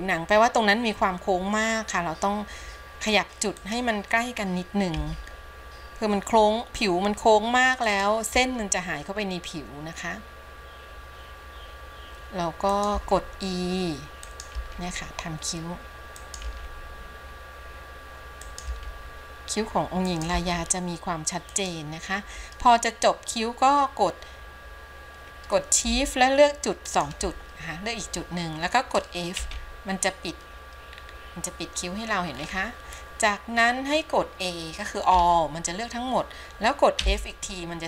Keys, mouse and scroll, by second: 27.0 shift+click, 29.6 f, 31.1-32.5 scroll down 3, 32.5-33.4 scroll up 4, 33.8-35.3 scroll down 2, 35.3 a.